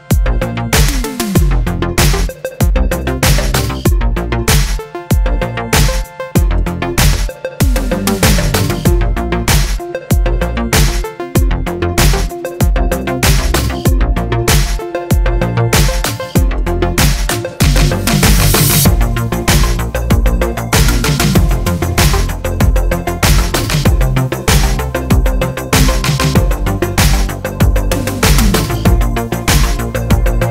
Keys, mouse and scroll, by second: 0.2 shift+click, 1.9 ctrl+j, 2.7 click, 3.0-4.3 middle drag, 4.3 click, 4.8-7.9 middle drag, 6.4 g, 13.5 click, 16.0 middle click, 22.8 click, 24.1 x, 28.7 scroll up 1, 28.8-30.5 middle drag, 29.8 Tab.